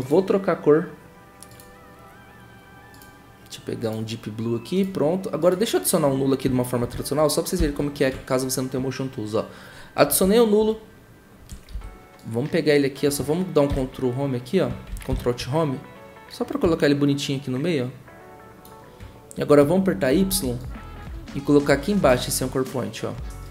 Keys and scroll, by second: 7.6 ctrl+alt+shift+y, 11.7 v, 13.7 ctrl+Home, 15.1 ctrl+alt+Home, 20.2 y.